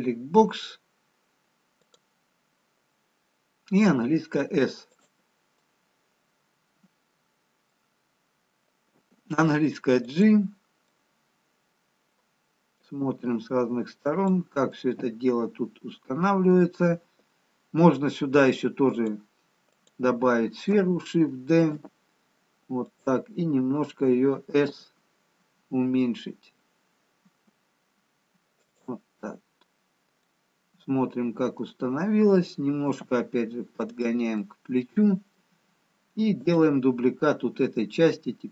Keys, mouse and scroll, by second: 1.9 click, 6.0 middle click, 6.0 s, 9.4 g, 11.0 middle click, 14.3 g, 14.7 middle click, 20.8 click, 21.7 shift+d, 24.6 s, 30.4 middle click, 32.8 g, 35.3 middle click, 36.4 click.